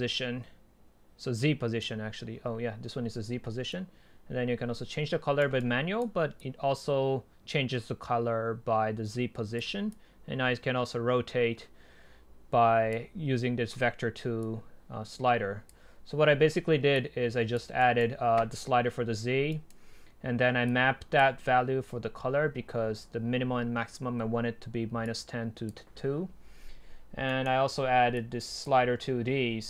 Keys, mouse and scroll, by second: 4.9-6.4 right drag, 6.4 click, 15.5 click, 16.1-17.0 scroll up 2, 17.0 click, 17.8 right click, 17.9-19.8 drag, 19.8 right click, 19.9-20.7 middle drag, 19.9-20.7 scroll down 2, 20.7-23.2 right drag.